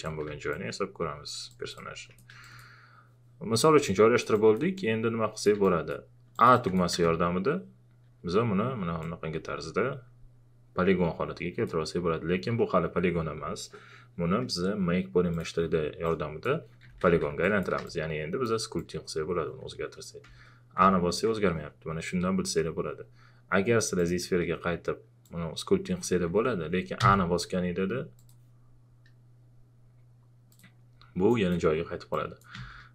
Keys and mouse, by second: 0.0-0.3 typing, 0.5-2.4 drag, 3.9-5.6 alt+drag, 6.9 a, 8.1 q, 9.0-16.8 drag, 16.8 shift+f, 17.4 click, 17.8 space, 18.3 space, 18.8-20.2 drag, 20.2 ctrl+z, 20.8 a, 24.0-27.0 drag, 27.0 a, 28.2 click, 30.5 click, 32.5 a.